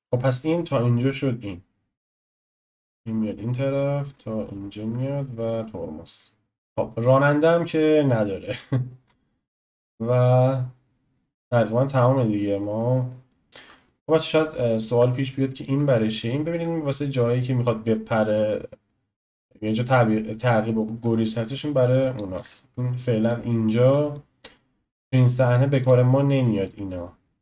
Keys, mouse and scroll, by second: 6.7-9.0 drag, 6.8-7.3 scroll up 4, 9.0-11.5 scroll down 5, 9.5 click, 11.5-14.0 shift+middle drag, 14.0 scroll up 2, 14.9-15.4 scroll down 1, 15.4-16.3 shift+middle drag, 16.3 drag, 22.4 ctrl+z, 23.3-25.8 middle drag, 25.8 click, 26.6 click.